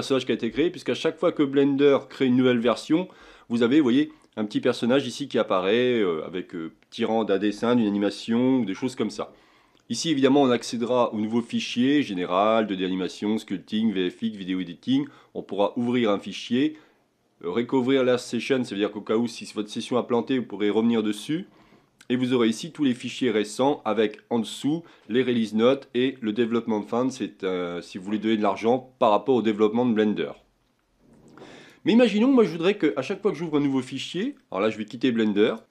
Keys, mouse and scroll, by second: 33.6-35.7 shift+middle drag.